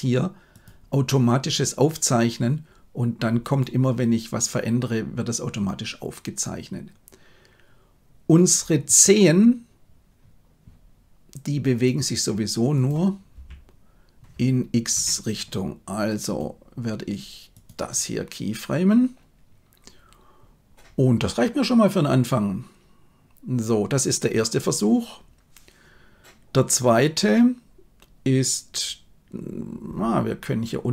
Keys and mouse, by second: 1.8-3.7 drag, 11.9-12.9 drag, 13.3 r, 16.2-17.7 right drag.